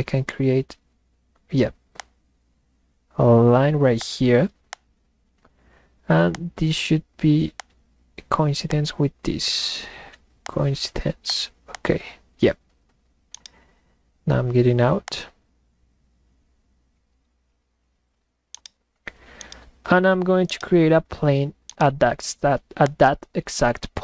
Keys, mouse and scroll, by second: 2.0 click, 4.0 click, 4.7-6.4 drag, 8.7 click, 10.4 click, 11.3 click, 13.2 middle click, 13.7 middle click, 15.0 click, 18.5-18.9 middle drag, 18.6 right drag, 19.3 middle click, 19.4 right click, 20.4 middle click, 20.6-21.0 right drag, 21.2 middle click, 21.6 middle click, 21.8 right click, 22.9 click.